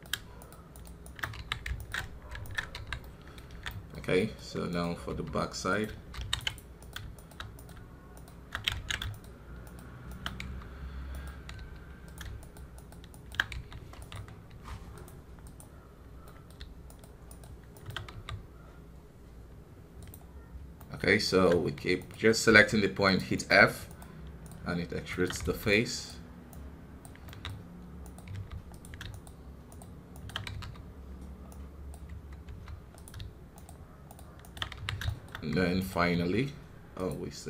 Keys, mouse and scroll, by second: 1.3 f, 1.7-2.7 alt+right drag, 2.7 f, 3.0 middle click, 3.5 alt+a, 3.6-4.7 middle drag, 4.7 right click, 5.1 f, 6.8-8.7 right drag, 8.7 ctrl+z, 9.1-10.4 shift+right drag, 10.4 f, 11.1 right click, 11.5 f, 12.4-13.5 shift+right drag, 13.5 f, 14.0 right click, 14.5 f, 16.2 middle click, 16.8-18.1 shift+right drag, 18.1 f, 20.7-21.9 middle drag, 21.9 right click, 22.5 f, 23.3 middle click, 23.8-25.4 shift+right drag, 25.4 f, 25.7-27.2 right drag, 27.2-28.3 middle drag, 28.3 f, 29.1-30.5 shift+right drag, 30.5 f, 31.5 right click, 32.4 f, 33.5-34.7 shift+right drag, 34.7 f, 35.0 shift+middle click, 35.7 right click, 36.1 f.